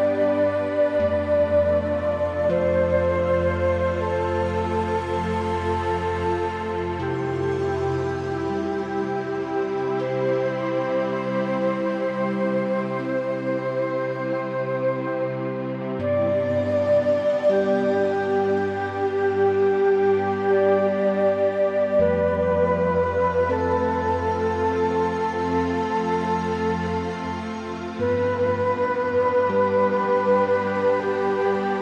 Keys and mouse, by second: 2.2 `, 2.8 s, 4.1 s, 4.3 z, 4.6 x, 4.9 y, 6.3 g, 8.4 `, 9.0 shift+middle click, 9.6 s, 10.2 z, 10.3 x, 12.5 ctrl+a, 13.3 middle click, 14.1 shift+middle click, 14.3 middle click, 16.3 Tab, 16.6 Tab, 17.6 `, 19.3 shift+middle click, 19.8 g, 20.2 z, 20.3 x, 22.1 shift+middle click, 22.6 s, 22.8 z, 23.0 x, 25.1 g, 25.5 x, 25.8 z, 27.7-31.8 drag.